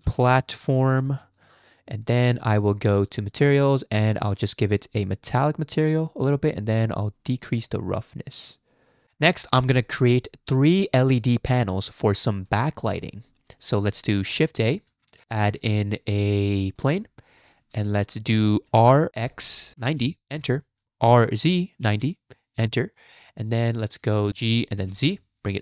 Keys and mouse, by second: 3.0 click, 3.3 click, 4.7-6.4 drag, 6.7-9.2 drag, 14.9 shift+a, 18.7 r, 21.1 r, 24.3 g.